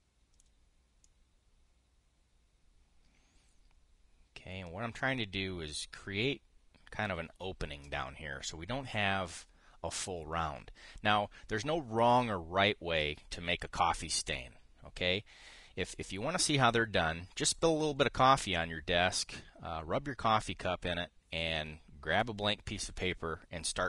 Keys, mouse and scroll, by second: 0.0-1.2 drag, 1.7-7.9 drag.